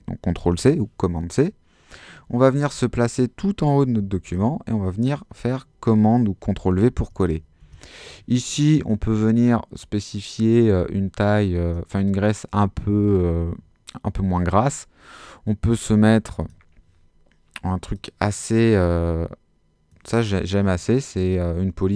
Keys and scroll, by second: 4.3 super+v, 7.6 super+a.